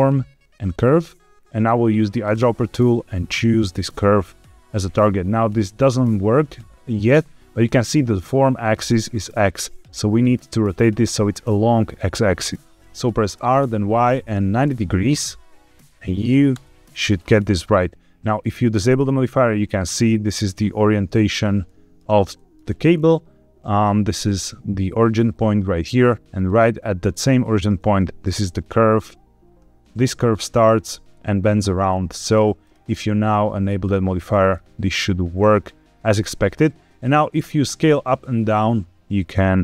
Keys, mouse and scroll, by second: 2.2 click, 12.5 KP_Subtract, 12.5 Escape, 13.3 r, 13.6 y, 14.5 KP_9, 14.5 KP_0, 16.5 KP_Enter, 18.8 click, 21.6 shift+middle drag, 22.3 middle click, 22.8-24.6 scroll up 3, 26.2 click, 27.9 shift+middle drag, 31.7-32.5 scroll down 2, 32.5 click, 33.8 click, 34.4-36.1 middle drag, 37.3 s.